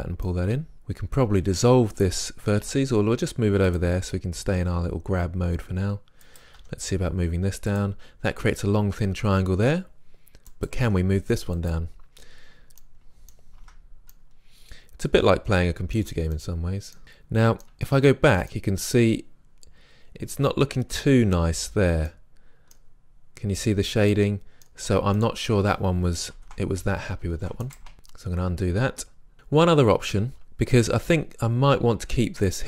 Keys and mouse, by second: 0.3 middle drag, 0.6 click, 0.7-2.4 right drag, 2.7 g, 3.8-6.0 drag, 6.3-8.0 right drag, 6.6 g, 8.1-9.7 drag, 10.5-11.7 drag, 10.8 g, 12.4 click, 13.6 Tab, 16.0 Tab, 17.7 Tab, 24.8 Tab, 26.4 ctrl+z, 27.2 ctrl+z, 27.7 click, 27.9 ctrl+z.